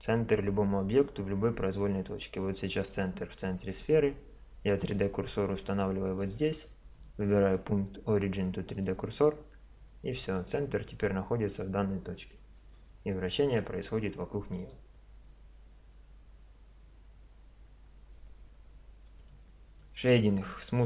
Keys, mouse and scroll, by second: 4.8-6.6 drag, 6.9-8.7 drag, 10.5-12.7 middle drag, 12.7 r, 18.3-20.8 middle drag.